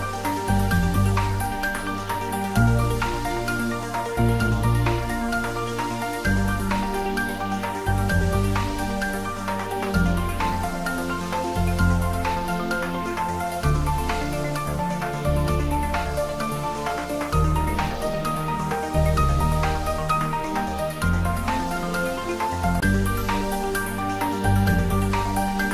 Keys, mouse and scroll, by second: 0.6 s, 0.9 z, 2.1 click, 2.5-4.8 middle drag, 4.8 s, 5.8 click, 7.5 3, 8.3 click, 10.4 alt+shift+click, 11.9-13.9 middle drag, 13.9 click, 15.9 shift+z, 16.5 scroll up 1, 17.1 shift+z, 17.4 middle click, 18.5-19.4 scroll down 1, 19.6 e, 21.2 click, 22.5 2, 23.4 click, 24.0 alt+click.